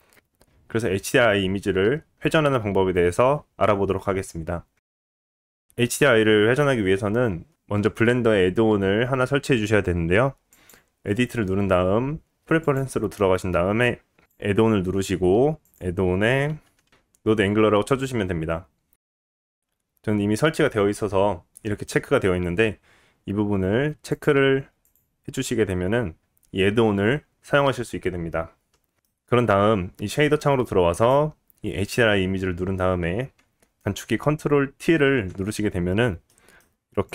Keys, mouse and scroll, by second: 10.5-31.0 drag, 29.1 middle click, 31.0-37.0 middle drag, 34.8 ctrl+t, 37.0 click.